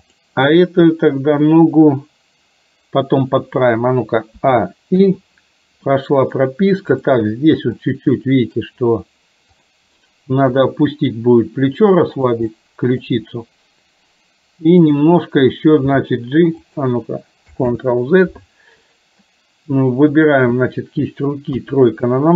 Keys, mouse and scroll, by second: 0.0 click, 4.5 a, 5.0 i, 6.0 middle click, 7.1 click, 7.9 middle click, 9.7 click, 10.6 r, 12.5 middle click, 14.9 click, 16.0 g, 17.7 ctrl+z, 19.0 middle click, 20.2 click, 21.6 KP_3.